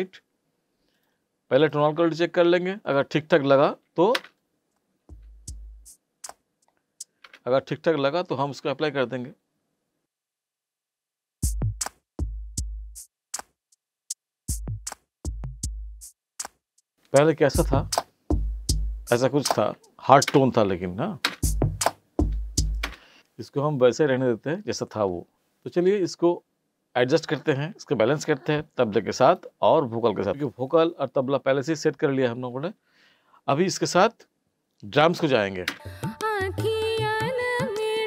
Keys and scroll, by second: 4.2 space, 7.2 space, 11.2 space, 20.2 space, 22.8 space, 35.7 space.